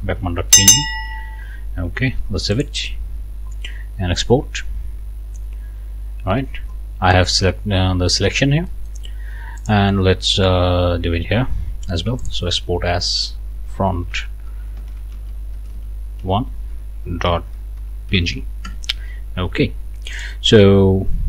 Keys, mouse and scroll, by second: 2.5 click, 4.2 click, 8.7 click, 8.8 right click, 9.6 click, 12.2 click, 14.0-18.7 typing, 20.2 click.